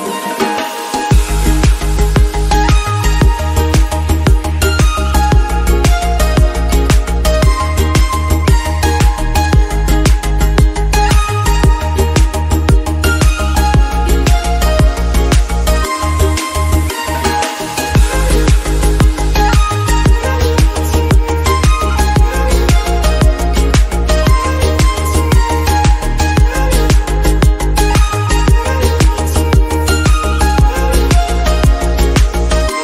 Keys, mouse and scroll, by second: 0.3 click, 1.4 click, 3.7 click, 4.6 click, 7.3-8.4 middle drag, 8.4 click, 8.7 s, 13.9 middle click, 14.1 KP_7, 14.7 g, 16.0 click, 16.2 click, 16.4 click, 16.9-17.9 drag, 19.4 click, 19.6-20.0 scroll down 11, 20.0-22.4 drag, 22.7 middle click, 22.9 scroll up 2, 23.1 middle click, 23.5 click, 23.8 KP_Decimal, 24.3 scroll down 1, 24.5 middle click, 25.0 /, 25.2 middle click, 26.2 Tab, 26.6 middle click, 27.2 3, 27.3 click, 28.0 shift+d, 28.9 p, 29.4 Tab, 29.5 click, 29.9 click, 30.5 click, 31.4 middle click, 32.1-32.8 drag.